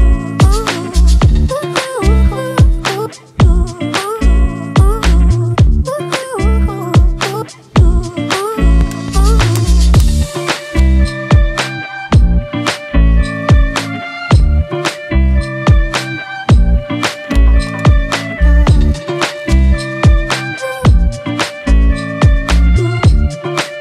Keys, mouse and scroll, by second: 13.2-18.3 scroll down 2.